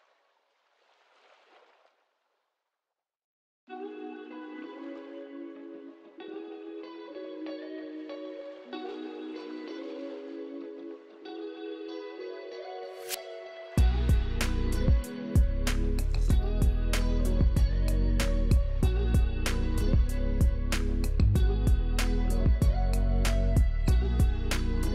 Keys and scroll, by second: 0.7 alt+space, 9.2 alt+space, 12.4 Delete, 13.2 alt+space, 15.7 alt+space, 16.2 alt+space, 16.8 alt+space, 18.9 ctrl+z, 20.1 ctrl+z, 20.6 space, 24.0 ctrl+z, 24.2 ctrl+z, 24.3 ctrl+z, 24.7 space.